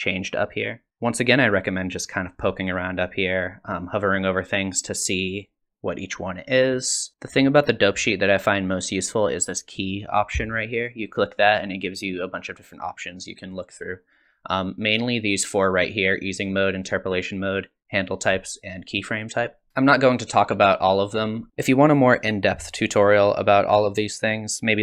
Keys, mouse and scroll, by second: 11.1 click, 19.7 click.